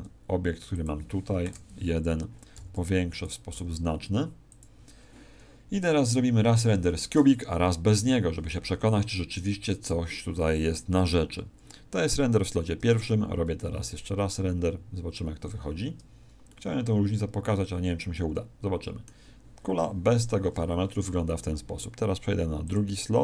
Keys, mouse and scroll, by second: 0.8 click, 1.4 KP_0, 2.5 s, 3.2 click, 3.5 g, 4.5 click, 5.9 click, 9.7 click.